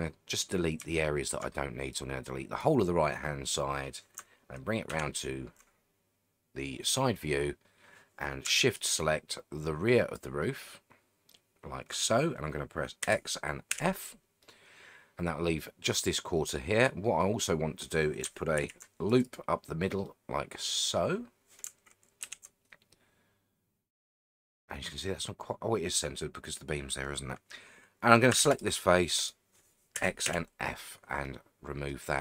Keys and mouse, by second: 1.0 shift+middle click, 1.9 click, 4.9 ctrl+KP_3, 8.8-10.1 shift+drag, 13.0 x, 14.4-15.6 middle drag, 16.5 middle click, 17.2 middle click, 18.6 ctrl+r, 19.2 click, 20.0 middle click, 22.2 ctrl+KP_3, 28.3 3, 28.5 click, 29.9 x, 31.2 middle click.